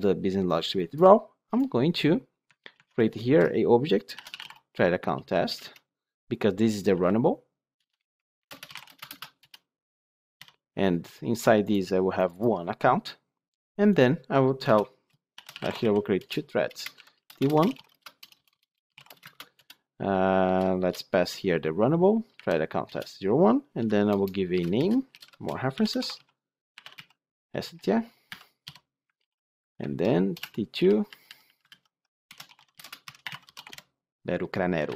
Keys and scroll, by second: 5.4 Return, 9.1 ctrl+space, 9.3 Return, 16.1 Return, 19.2 Return, 19.4 ctrl+space, 19.5 Return, 29.1 ctrl+d, 30.3 ctrl+d, 31.5 ctrl+shift+Left.